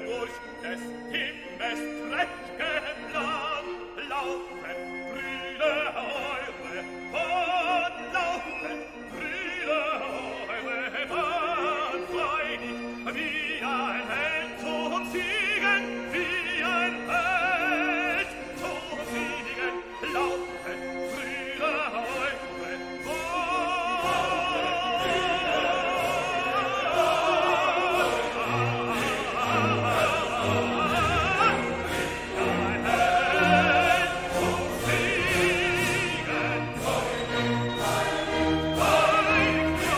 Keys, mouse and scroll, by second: 3.3 click, 5.4 click, 6.4 click, 7.4 2, 7.9 0, 9.3 click, 10.3 4, 10.7 0, 11.6 click, 12.2 click, 13.5-18.1 drag, 19.4-19.9 scroll down 2, 20.3 scroll down 1, 24.3 scroll down 2, 25.3-25.7 scroll down 2, 26.0-26.3 scroll up 2, 28.4 scroll down 2, 30.0-30.4 scroll up 2, 31.2-31.5 scroll up 2, 33.2 scroll down 2, 34.1 scroll down 2, 34.9 scroll up 2, 35.8 scroll down 2, 37.2 click, 38.0 click, 38.7 click, 39.2 click, 39.7 click.